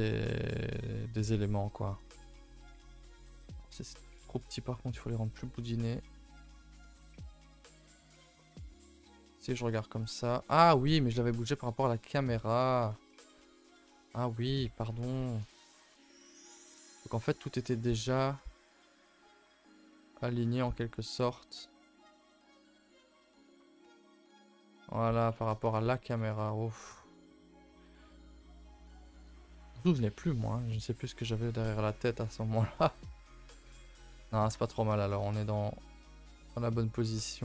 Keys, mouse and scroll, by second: 0.2-1.9 shift+middle drag, 1.9 click, 2.3 Tab, 2.5 middle drag, 2.7 scroll down 4, 3.0-4.9 shift+middle drag, 4.9 click, 5.2 click, 5.7 click, 6.4 click, 6.8-8.1 middle drag, 8.1 KP_0, 9.0-9.5 scroll down 2, 9.5 scroll up 1, 9.7-10.1 shift+middle drag, 10.1-10.8 scroll down 6, 10.8 click, 11.1 middle drag, 11.4-12.1 scroll up 1, 12.5-12.8 scroll up 5, 12.8 Tab, 13.1 middle click, 14.0 KP_0, 14.8 scroll up 2, 15.2-15.5 shift+middle drag, 15.5 a, 15.7 a, 16.0 click, 16.5 3, 19.0 alt+click, 19.5 g, 23.9 Tab, 24.3 z, 25.1 a, 25.3 a, 25.7 Tab, 26.3 alt+click, 27.1 alt+click, 27.6 alt+click, 28.9 alt+click, 29.3 alt+click, 30.0 g, 32.1 z, 33.0-33.4 shift+middle drag, 33.4 scroll down 1, 33.6 Tab, 33.8-34.3 middle drag, 34.3 scroll up 3, 34.6 Tab, 34.7 shift+middle click, 35.2 scroll up 4, 35.4 a, 35.6 a, 36.4 click, 36.7 shift+middle click, 37.0 scroll up 2, 37.2 middle click.